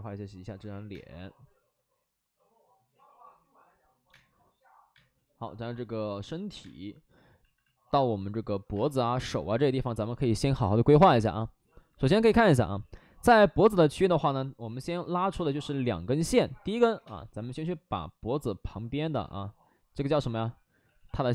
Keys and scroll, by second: 0.8 space, 3.9 space, 4.1 space, 4.9 space, 8.6 space, 12.4 space, 14.5 5, 15.1 2, 15.2 space, 16.1 alt+s, 16.8 5, 16.9 space, 20.7 ctrl+z, 20.9 ctrl+z.